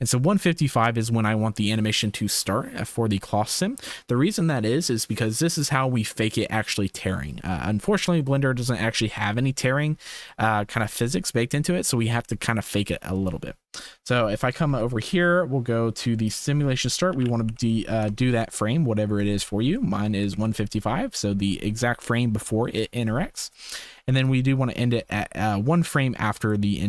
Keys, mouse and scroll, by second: 8.3-9.0 drag, 10.5-10.9 shift+right drag, 11.6 ctrl+s, 16.2-18.0 middle drag, 17.4 KP_5, 19.8 shift+middle drag, 20.3 ctrl+s, 20.6-21.0 drag, 24.3-26.5 drag.